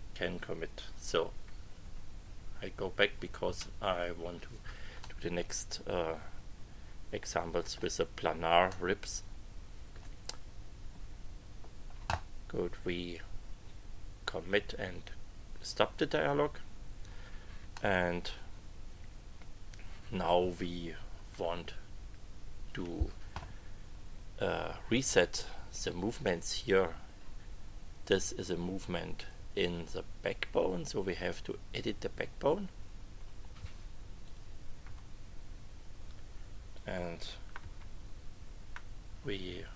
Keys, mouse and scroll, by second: 1.4 Page_Up, 3.4 Return, 5.0-7.0 drag, 7.0 middle click, 8.7-10.1 middle drag, 15.6 click, 17.7-18.9 middle drag, 18.9-20.4 drag, 21.4 KP_1, 31.7 click, 34.2 click, 36.7 click, 37.5 KP_1.